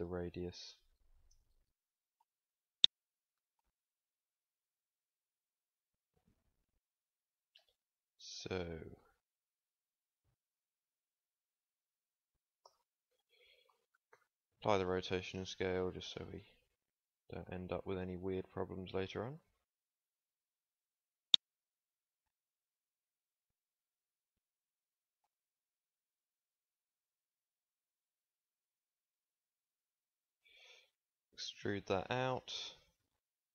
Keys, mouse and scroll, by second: 0.0 s, 1.7 g, 4.1 z, 8.9 s, 12.6 Tab, 13.6 Tab, 14.1 ctrl+a, 15.7 Tab, 17.4 s, 21.9 g, 23.5 shift+Tab, 26.0 a, 26.8 b, 28.3 g, 31.0 e.